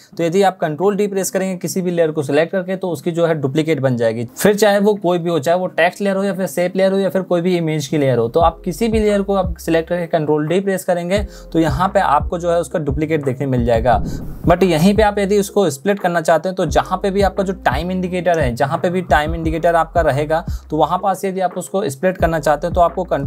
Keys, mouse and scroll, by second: 10.0 ctrl+d, 23.0 ctrl+shift+d.